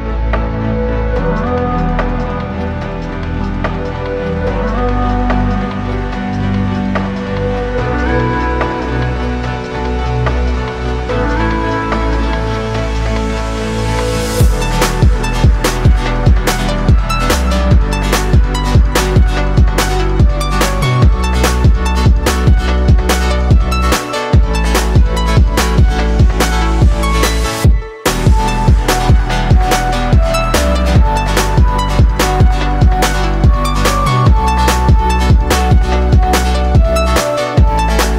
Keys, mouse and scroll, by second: 2.4 space, 13.1 space, 18.7 r, 30.7 t, 37.7 space.